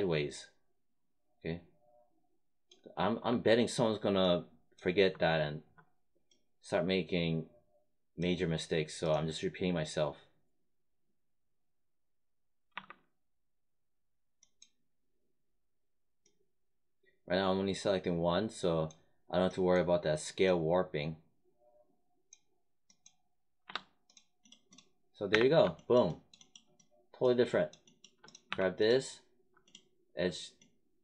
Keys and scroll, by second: 12.7 1, 23.6 3, 25.2 space, 28.4 1.